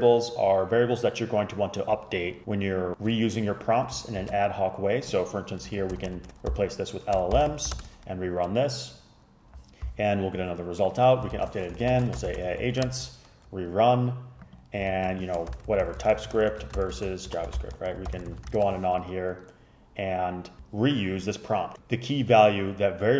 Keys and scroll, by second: 4.3 shift+super+Left, 6.0-7.9 typing, 11.4 shift+super+Left, 11.6-13.2 typing, 15.0 shift+super+Left, 15.4-18.9 typing.